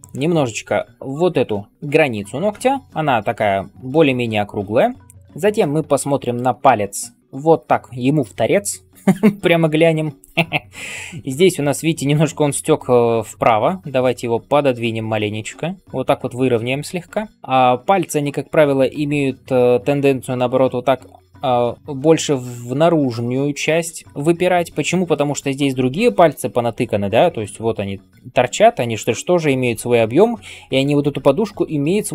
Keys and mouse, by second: 12.8-13.1 ], 13.2 ], 13.3 ], 17.3 [, 17.3 ], 27.0-32.1 typing.